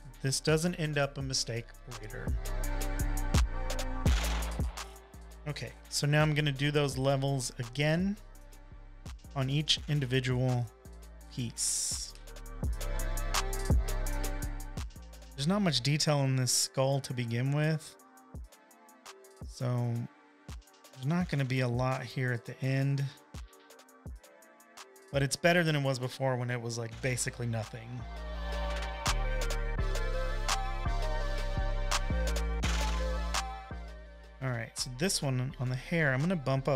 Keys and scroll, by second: 1.9 typing, 3.1 super+d, 3.1-11.5 typing, 7.6 super+-, 12.6 v, 12.9 super+l, 35.1 super+l.